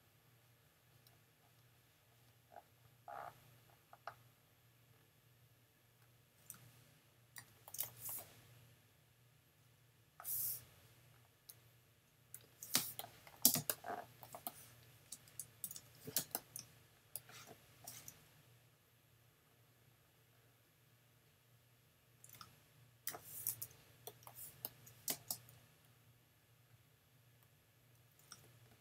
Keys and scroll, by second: 7.4 super+j, 12.8 super+space, 15.6 super+-, 16.2 super+space, 23.1 super+j, 25.1 super+space, 25.9 space.